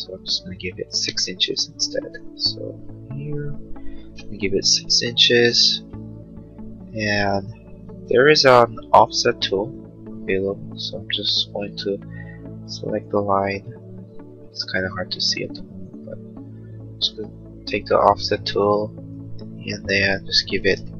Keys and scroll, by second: 1.0 ctrl+z, 3.8 6, 4.2 Return, 5.8 space, 14.9 f.